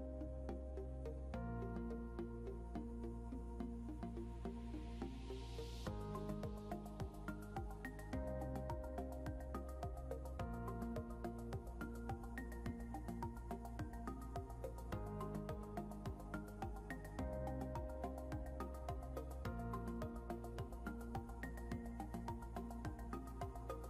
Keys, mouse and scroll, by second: 1.7-2.1 scroll down 1, 5.2 scroll down 1, 7.1 scroll up 1, 9.3 click, 18.1 click, 18.7 scroll down 1, 19.2 click, 21.3 ctrl+z, 22.2 click.